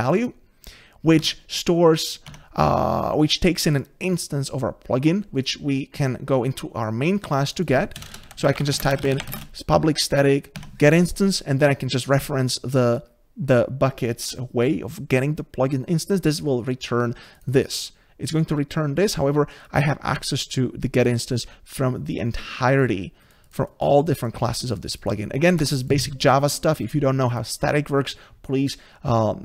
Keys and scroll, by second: 1.2 Tab, 2.3 Tab, 10.6 Tab, 25.6 Escape.